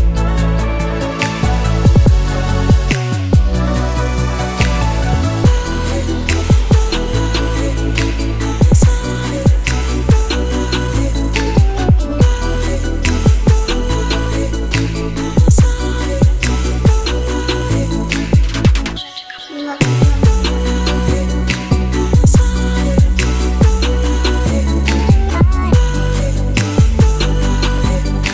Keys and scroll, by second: 7.0 0, 7.5 shift+5, 7.8 shift+Return, 8.8 Return, 13.7 •, 14.6 1, 14.9 Return, 25.5-26.4 typing.